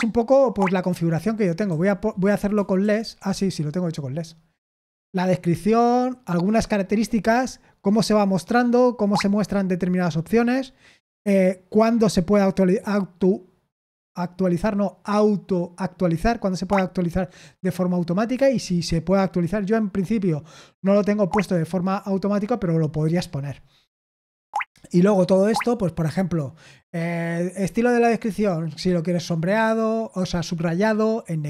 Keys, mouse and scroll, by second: 2.8 ctrl+p, 3.3 Return.